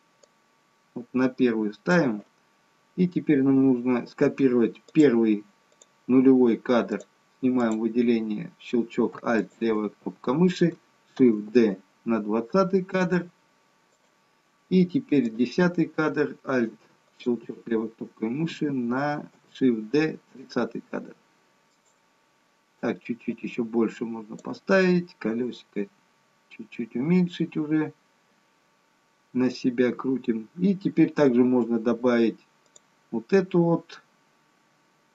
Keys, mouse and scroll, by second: 0.4 click, 5.0 click, 5.9 click, 7.0 click, 7.7 click, 9.5 alt+click, 11.3 shift+d, 15.3 click, 17.2 alt+click, 19.2 shift+d, 23.4 click, 26.2-27.2 scroll down 1, 27.2-28.2 scroll up 1, 28.2-29.3 scroll down 2, 29.3-30.3 scroll down 3, 30.3-31.2 scroll down 2, 31.2-31.9 scroll down 1, 32.9 click.